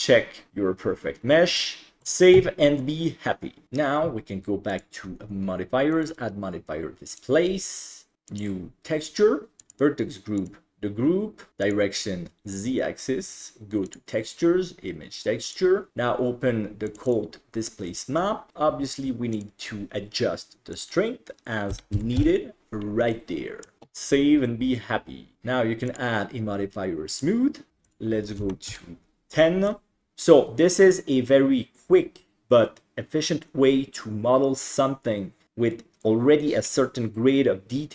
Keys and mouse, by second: 2.0 ctrl+s, 6.0-7.3 drag, 8.3 click, 9.6 click, 11.8-12.4 drag, 15.5 click, 19.4 click, 20.8-22.3 drag, 23.2-23.7 middle drag, 23.8 ctrl+s, 25.9-27.3 drag, 28.0 click, 29.7-30.1 middle drag, 30.2-30.9 middle drag.